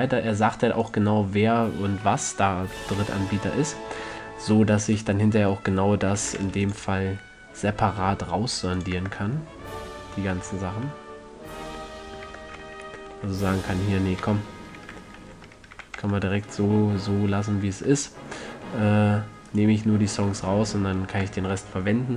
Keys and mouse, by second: 1.3-2.5 drag, 2.5 middle drag, 2.9 a, 3.8 middle click, 5.4-6.1 middle drag, 6.4 middle click, 6.7 ctrl+r, 9.2-10.3 drag, 9.3 Tab, 10.5-11.1 drag, 12.6 Tab, 13.2 ctrl+z, 13.5 ctrl+z, 13.9 ctrl+z, 15.5 ctrl+z, 16.1 a, 16.3 Tab, 18.1 Tab, 19.8-22.1 drag, 21.0 a.